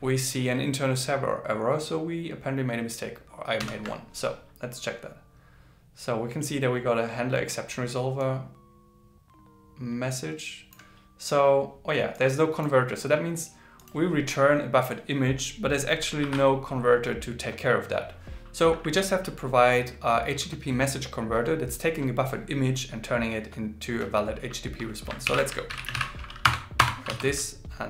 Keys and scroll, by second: 25.3 alt+l, 25.7 shift+b.